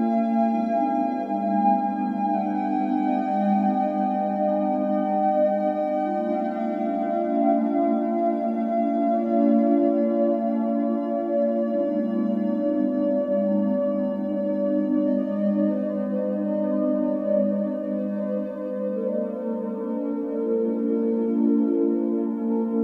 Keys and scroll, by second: 0.9 d, 2.4-6.0 typing, 4.3 Return, 7.5 Return, 7.5 typing, 8.7-10.3 typing, 12.4 e, 14.1 space, 15.4 f, 17.4 space, 20.1 Escape, 20.3 Escape.